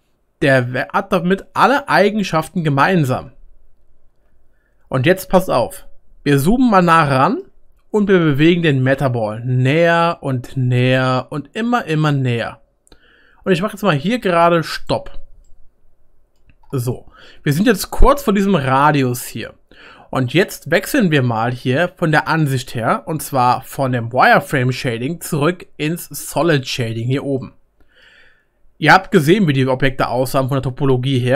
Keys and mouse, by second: 6.6-11.4 shift+middle drag, 7.9 g, 12.2 middle click, 14.5-18.1 middle drag, 18.1-31.3 right drag, 27.2-27.9 middle drag.